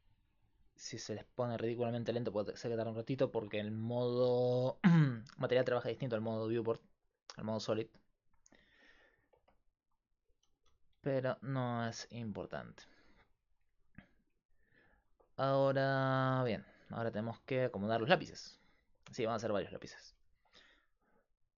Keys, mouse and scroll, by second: 0.0-21.5 typing, 6.5-8.2 drag, 8.2 middle click, 9.7-11.6 right drag, 17.1 ctrl+z, 19.8-21.5 middle drag.